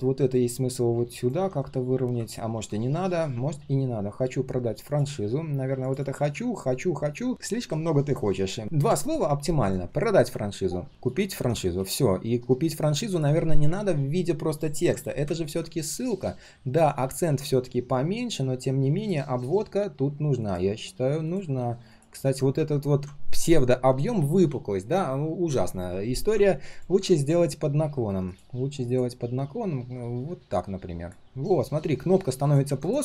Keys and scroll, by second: 2.5 ctrl+z.